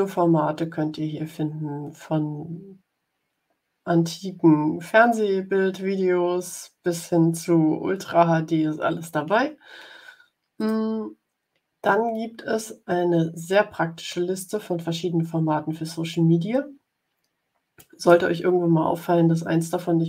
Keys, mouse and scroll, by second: 10.5 click, 14.0-18.2 drag.